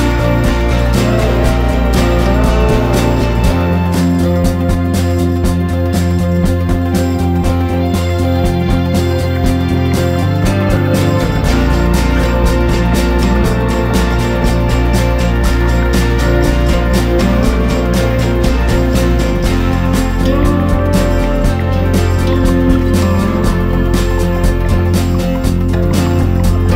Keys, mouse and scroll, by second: 10.2 ctrl+g, 10.6 click, 11.8 ctrl+d, 12.0 click, 13.3 ctrl+d, 14.2 click, 15.0 click, 15.8 shift+click, 16.1 shift+click, 16.9 click, 18.1 ctrl+g, 19.0 click, 20.5 Down, 20.8 Down, 22.4 ctrl+shift+g, 23.5 click, 24.2 ctrl+shift+g, 24.9 click, 25.3 ctrl+shift+g, 25.9 click, 26.4 ctrl+shift+g.